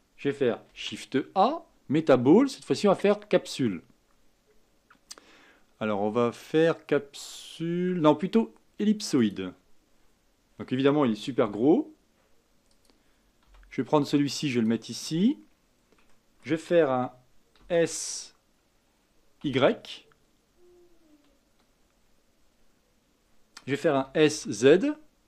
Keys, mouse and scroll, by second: 0.7 shift+a, 9.9-11.4 scroll down 4, 11.4 s, 13.4 g, 15.0-16.1 scroll up 6, 16.1-17.6 shift+middle drag, 17.6 s, 22.0-22.3 scroll down 2, 22.3-23.9 scroll up 2, 23.9 s.